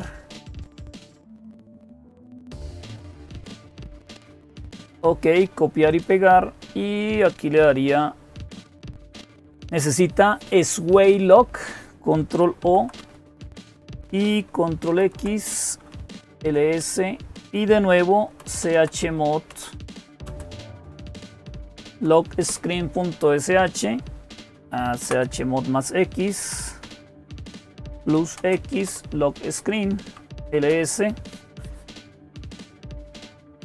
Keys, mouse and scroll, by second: 0.3 click, 1.3 click, 2.8-3.8 drag, 4.3 click, 5.7 click, 12.4 ctrl+o, 13.1 Return, 14.7 ctrl+x, 15.6-16.5 typing, 18.0-21.9 typing, 22.3 Return, 24.4 Up, 25.2 Left, 25.8 Left, 25.9-26.5 Left, 27.5-28.7 typing, 28.7 Return, 29.9-30.8 typing.